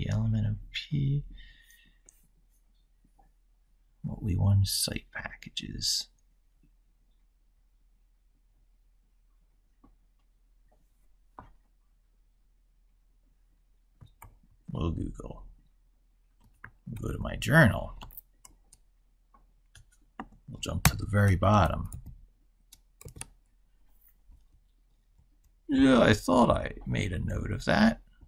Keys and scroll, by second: 14.0 ctrl+super+Left.